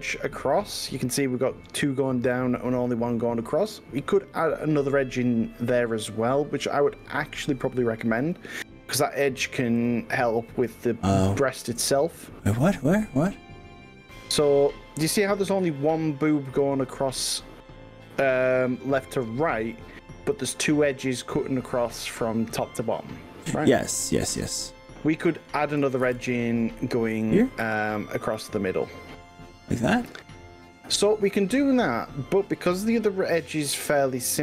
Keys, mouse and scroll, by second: 0.1-4.2 middle drag, 4.8-5.2 scroll up 3, 5.6 scroll down 1, 6.6 click, 6.9-8.4 drag, 9.8 click, 10.5-12.0 middle drag, 12.0-14.1 middle drag, 15.0 click, 16.0-16.4 scroll down 1, 26.0 ctrl+r, 33.8-34.4 scroll up 4.